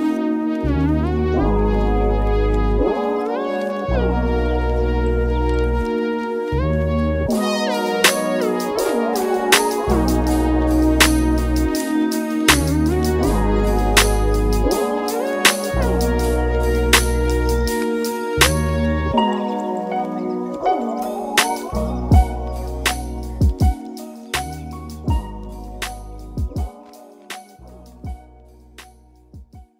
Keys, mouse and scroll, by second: 0.4 ctrl+j, 5.8-8.7 middle drag, 8.7 click, 10.5-12.7 drag, 12.7 ctrl+j, 16.2-25.8 drag, 25.8 ctrl+j.